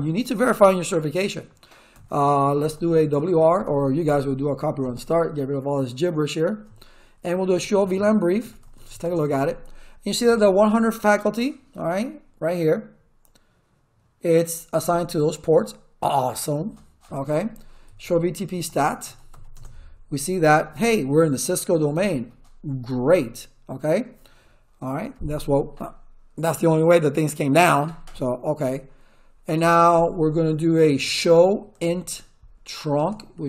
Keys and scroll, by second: 1.7-3.7 typing, 4.8 Return, 7.2-9.5 typing, 17.6-19.8 typing, 31.0-33.4 typing.